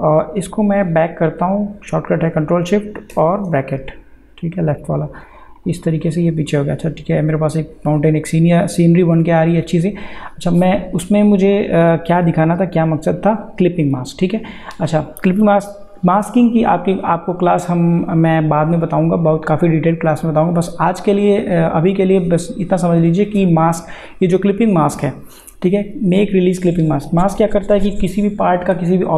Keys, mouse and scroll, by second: 3.1 ctrl+shift+[, 5.6 click, 11.5 click.